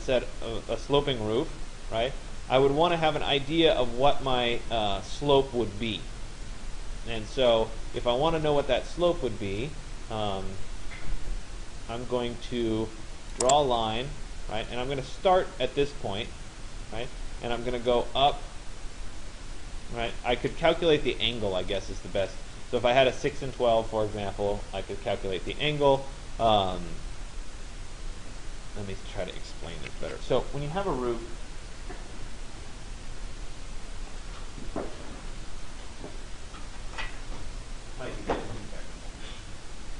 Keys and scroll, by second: 29.5 Escape.